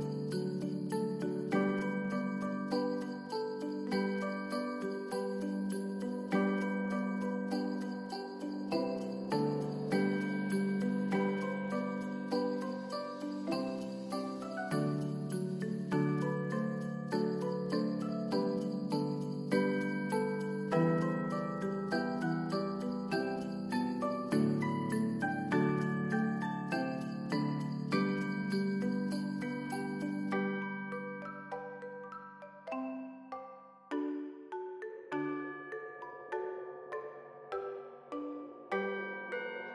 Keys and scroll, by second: 8.5 ctrl+s, 10.9 ctrl+s, 13.6 ctrl+z, 16.5 ctrl+s, 17.2 x, 21.4 ctrl+s, 26.9 F9.